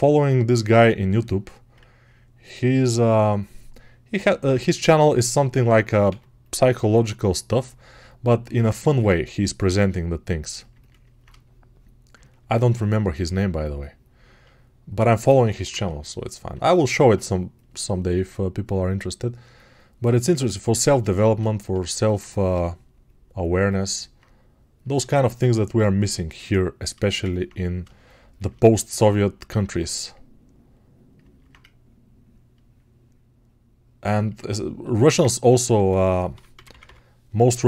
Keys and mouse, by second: 12.2-19.3 alt+drag, 24.0-31.1 drag, 31.1-37.6 ctrl+alt+right drag.